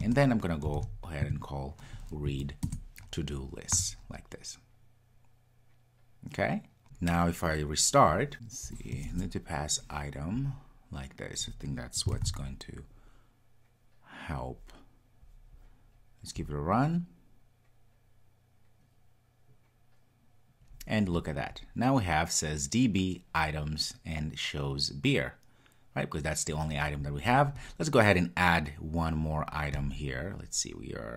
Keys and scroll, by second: 2.6 Return, 12.2 super+s, 16.6 ctrl+r.